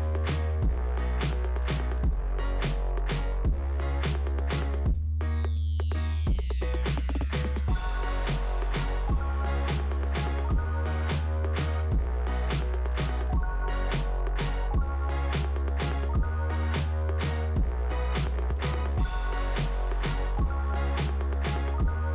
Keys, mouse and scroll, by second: 0.3 click, 1.0 click, 2.2 click, 3.0 click, 4.1 click, 4.5 click, 5.9 click, 9.1 click, 10.8 click, 10.9 click, 11.6 right click, 15.4 click, 17.0 click, 18.5 click, 21.6 scroll down 1.